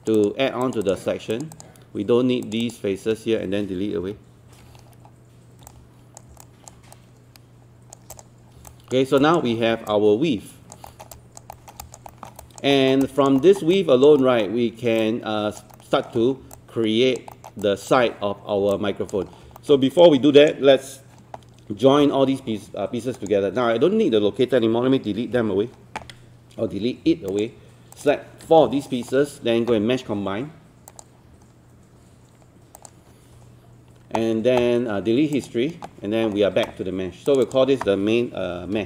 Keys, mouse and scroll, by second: 0.0 shift+click, 0.6 shift+click, 0.8 shift+click, 1.3 shift+click, 1.5 shift+click, 2.4 shift+click, 2.6 shift+click, 4.0 shift+Delete, 4.9-5.7 scroll down 1, 5.7 click, 6.4 alt+click, 7.0-8.1 right drag, 8.2 click, 8.7 alt+click, 9.2 alt+click, 9.5 scroll up 1, 9.9 alt+click, 10.9 alt+middle click, 11.2 alt+click, 11.5 alt+middle click, 11.8 alt+click, 12.1 alt+middle click, 12.4 alt+click, 12.7 alt+middle click, 13.0 alt+click, 13.4 alt+middle click, 13.8 alt+click, 14.2 alt+middle click, 15.0 alt+click, 15.8 alt+middle click, 16.2 scroll down 1, 16.6 alt+click, 17.9 alt+click, 18.7 alt+click, 19.3 scroll down 1, 19.6 alt+middle click, 20.0-21.1 drag, 22.4-23.2 scroll up 1, 23.2 click, 25.3 Delete, 27.3 click, 28.0 shift+click.